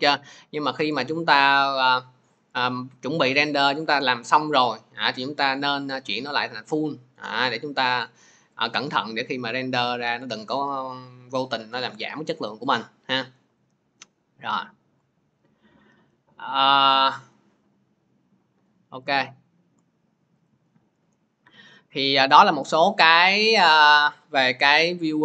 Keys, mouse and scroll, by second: 0.8 click, 5.6 click, 6.4 click, 7.9 click, 8.5 click, 14.9 click, 19.0 click, 20.3 click.